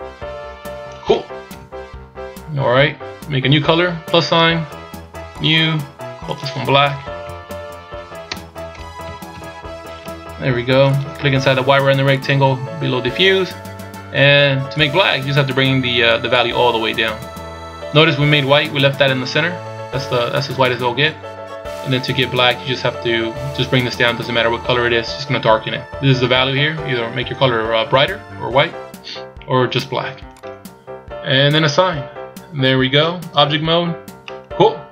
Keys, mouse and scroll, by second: 1.5 KP_1, 2.6-2.9 scroll down 1, 4.1 click, 5.3 click, 6.3 click, 12.1 click, 14.7 click, 21.8 click, 31.5 click, 33.2 Tab, 34.2 middle click.